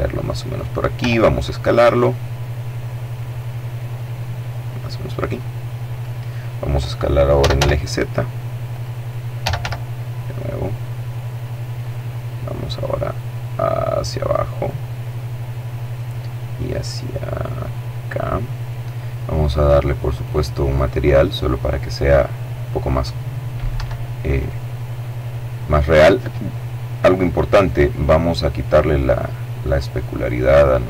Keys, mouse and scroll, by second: 0.1 s, 3.8 click, 4.5 click, 6.2-7.2 typing, 7.8 click, 8.3-9.2 typing, 10.9 click, 11.9-14.2 drag, 14.2 right click, 15.8-17.8 drag, 19.2 click, 21.2 click, 22.8 Escape, 23.5 right click, 27.6-30.8 drag.